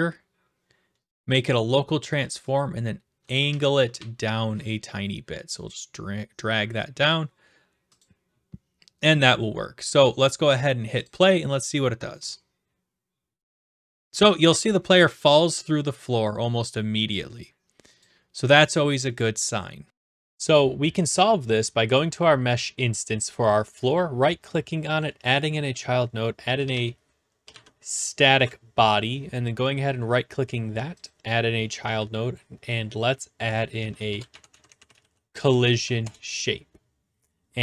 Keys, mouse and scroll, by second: 1.5 click, 3.3 click, 3.5 ctrl+z, 3.6-4.4 typing, 3.9 click, 4.6 right click, 7.0 click, 8.0 click, 9.3 click, 11.0-12.1 drag, 18.0-19.1 drag, 19.9 click, 21.9-23.0 drag, 23.9-25.0 right drag, 25.0-26.0 drag, 26.2-28.0 typing, 28.3 Return, 29.6 right click, 31.1-32.1 drag, 33.5-35.5 typing, 35.7 Down, 36.0 Return.